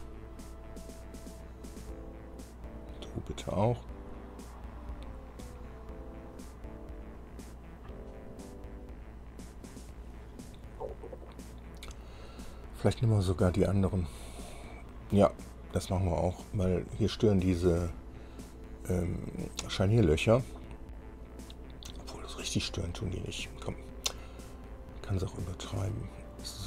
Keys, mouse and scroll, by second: 2.9 click, 4.8-6.7 drag, 8.3-8.9 scroll down 2, 9.7 scroll up 2, 16.1 click, 26.4 click.